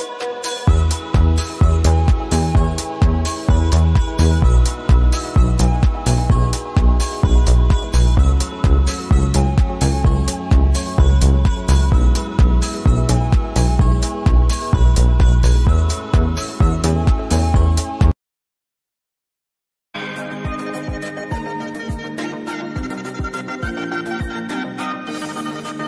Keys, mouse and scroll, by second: 0.2 a, 0.8-6.5 drag, 6.5-9.4 drag, 10.8 click, 12.3-17.0 drag, 17.8 alt+scroll up 1, 18.4 alt+scroll down 1, 19.6 v, 20.7-21.2 alt+scroll up 2, 21.2 click, 22.4-24.4 drag, 24.5 scroll down 1, 25.2 click.